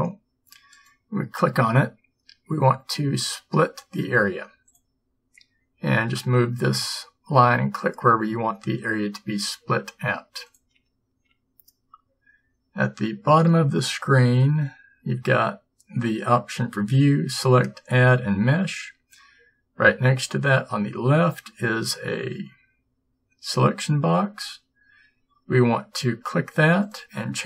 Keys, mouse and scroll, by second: 0.8-2.7 right drag, 2.7 click, 2.8-7.3 middle drag.